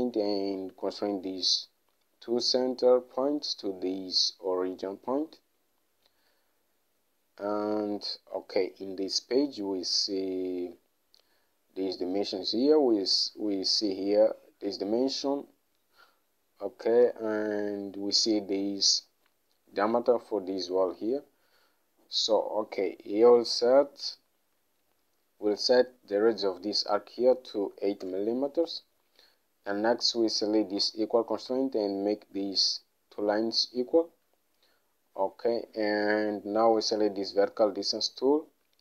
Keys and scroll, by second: 27.8 8, 28.1 Return.